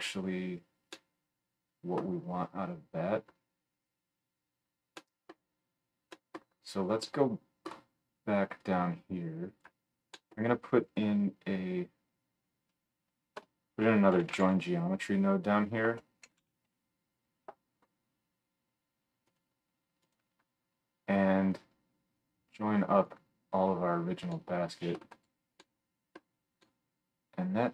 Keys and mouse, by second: 13.4 F3, 20.2-21.5 drag, 21.5-25.2 middle drag, 25.2-27.7 drag.